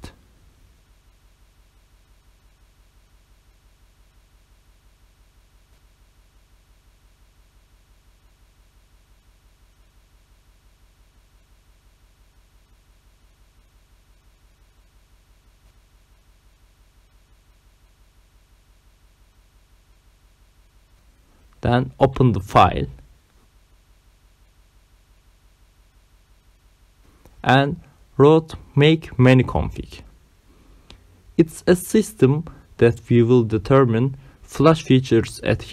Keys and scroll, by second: 1.0 ., 1.1 g, 1.2 i, 1.5 Return, 2.5 Return, 21.5 c, 21.6 d, 21.8 space, 24.5 Return, 25.9-29.5 typing, 30.7 Return.